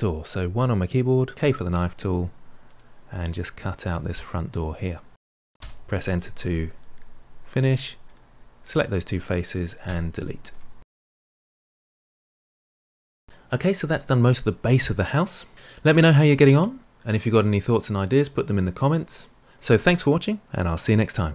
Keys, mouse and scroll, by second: 0.5 KP_1, 1.3 k, 7.6 3, 8.0 click, 8.8 shift+click, 9.8 Delete, 11.2-12.5 middle drag, 12.5-12.9 scroll down 1, 12.9 shift+middle click.